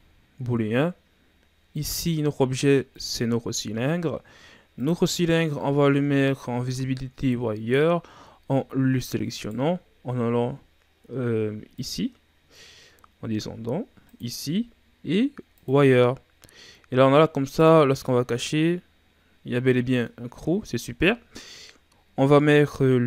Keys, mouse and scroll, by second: 0.0-0.9 drag, 1.7 click, 4.7-5.8 drag, 5.8-6.1 scroll down 2, 6.1-8.2 shift+scroll up 3, 8.2 scroll up 3, 8.5-9.3 shift+scroll down 3, 9.3 right click, 11.7 click, 12.2-12.9 scroll down 4, 12.9-14.0 scroll down 7, 14.0-17.1 drag, 17.6 click, 18.0-21.1 middle drag, 22.1-23.0 scroll up 1.